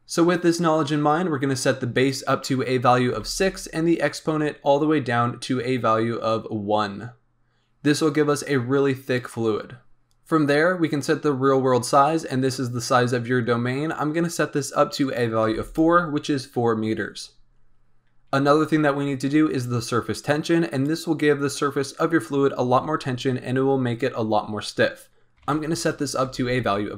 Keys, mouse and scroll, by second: 1.9-3.4 drag, 6.2-9.2 drag, 12.2-15.0 scroll down 2, 15.0 click, 17.7-18.3 scroll up 2, 18.3-20.1 scroll down 1, 20.7-23.7 drag.